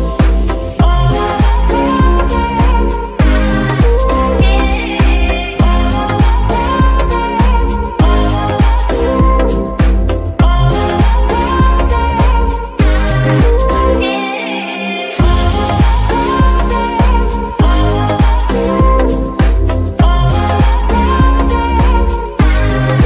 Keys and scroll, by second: 3.9 r, 3.9 z, 9.0 Escape, 9.8 g, 10.4 Escape, 13.9 g, 14.0 y, 15.7 r, 21.6 Escape, 22.6 alt+g.